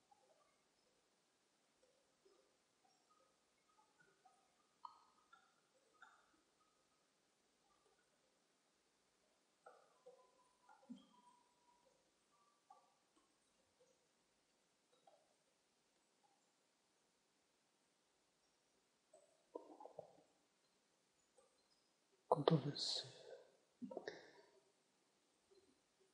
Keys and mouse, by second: 0.8 c, 3.6 right click, 3.6 c, 12.2 middle click, 12.5 click, 12.5-13.5 right drag, 13.0 click, 13.6 ctrl+z, 13.6 c, 16.3-18.2 drag, 16.3 right click, 19.9 Tab, 20.8 z, 22.9 ctrl+s, 25.2 z.